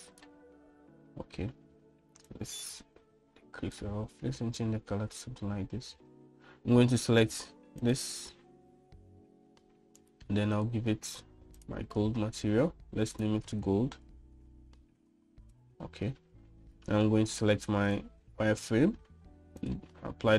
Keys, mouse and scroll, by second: 3.4-4.8 drag, 11.6-12.7 drag, 14.3-17.1 drag, 18.9 click.